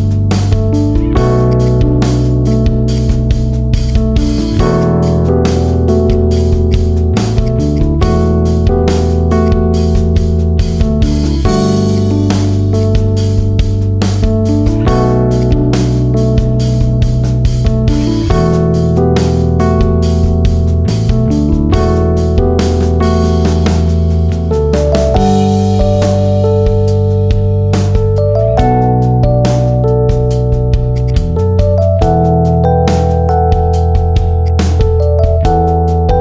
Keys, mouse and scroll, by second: 1.4 click, 1.6-2.0 drag, 2.0-2.4 middle drag, 2.4 click, 2.8 click, 3.2-3.6 middle drag, 3.6 alt+shift+click, 3.7 alt+shift+click, 4.0-4.7 middle drag, 4.7 shift+drag, 5.0 shift+click, 5.2-6.0 middle drag, 6.0 shift+drag, 6.2 shift+click, 6.6 shift+click, 7.0 shift+click, 7.4 shift+click, 7.6 alt+shift+click, 7.8 alt+shift+click, 8.4-9.3 middle drag, 9.3 drag, 9.6-10.0 middle drag, 10.0 shift+click, 10.6 f, 10.8-11.8 middle drag, 11.8 click, 12.0-12.6 middle drag, 12.6 shift+click, 13.2 f, 13.4-14.6 middle drag, 14.6 drag, 14.8-15.3 middle drag, 15.3 shift+click, 15.8 f, 16.1-18.1 middle drag, 18.1 Tab, 20.4-22.0 middle drag, 22.2 scroll up 2, 22.4-24.0 middle drag, 24.2-25.7 middle drag, 26.0 scroll down 2, 26.2-26.7 middle drag, 26.7 scroll down 1, 26.8-29.2 middle drag, 29.2 Tab, 29.8 KP_7, 30.4 ctrl+r, 31.2-32.2 middle drag, 32.2 KP_7, 33.0 g, 34.8 ctrl+b.